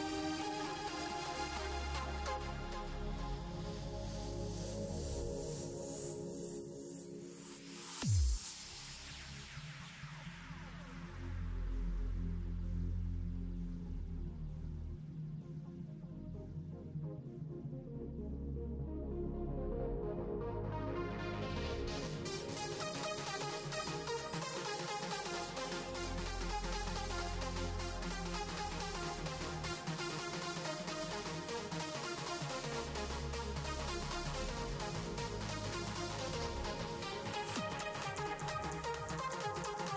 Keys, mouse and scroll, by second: 1.9 middle click, 2.5 Tab, 4.5 shift+d, 6.6 s, 8.3-9.5 middle drag, 9.5-10.3 scroll up 1, 10.3-18.5 drag, 20.7-22.4 shift+middle drag, 22.4 g, 28.4-29.0 scroll up 3, 29.0-30.3 middle drag, 30.3 r, 30.7 r, 33.3-35.5 shift+middle drag, 35.5 r, 37.6 middle click, 38.3 r, 39.0 r.